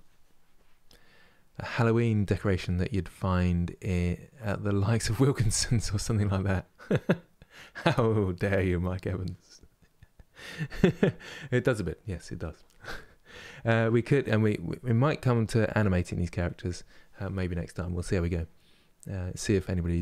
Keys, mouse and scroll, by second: 15.0-20.0 middle drag.